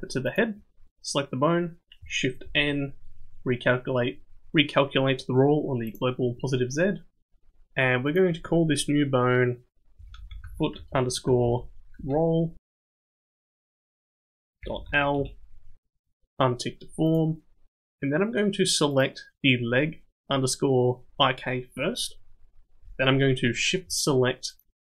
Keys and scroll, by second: 2.4 shift+n, 10.2 o, 13.2 l.